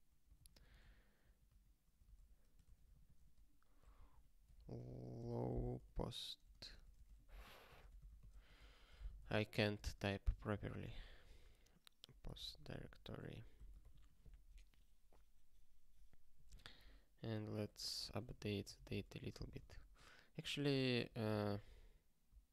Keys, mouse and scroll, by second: 0.1 ctrl+/, 0.3 ctrl+n, 0.5 ctrl+n, 2.0 Return, 2.6-9.7 typing, 10.4 Return, 10.6 ctrl+p, 10.9 ctrl+e, 12.0-13.5 typing, 13.9 ctrl+s, 17.6 click, 18.4 ctrl+b, 18.6 ctrl+d, 18.8 ctrl+d, 19.0 2, 19.3 3, 19.7 ctrl+s, 20.6 ctrl+e, 21.3 alt+b, 21.4 alt+b.